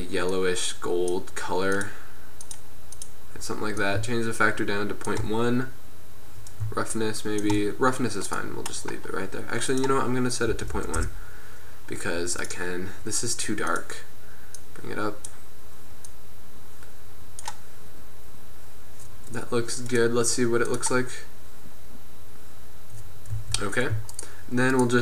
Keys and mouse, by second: 0.8 middle click, 1.1-5.6 drag, 5.6 middle click, 6.6-9.8 drag, 9.8-11.4 middle drag, 12.5-19.9 middle drag, 23.4 z.